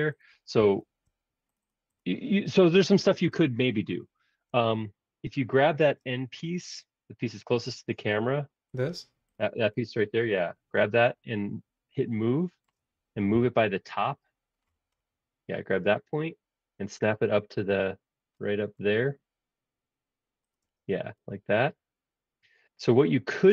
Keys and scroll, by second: 9.7 typing, 13.4 m, 20.6 space, 22.6 typing.